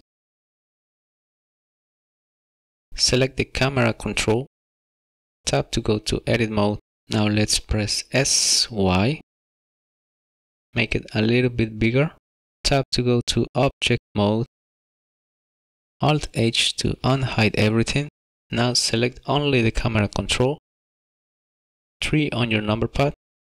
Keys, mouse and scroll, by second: 3.3 click, 5.5 Tab, 7.0 shift+middle click, 7.0 scroll down 2, 7.2 s, 8.4 y, 12.7 Tab, 16.5 alt+h, 18.9 click, 22.7 KP_3.